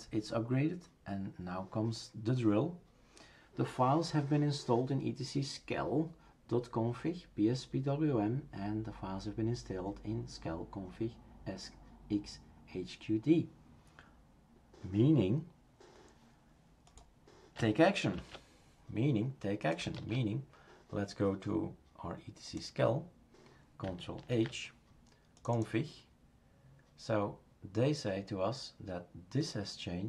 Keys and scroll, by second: 18.1 shift+super+q, 19.9 shift+super+q, 24.3 ctrl+h.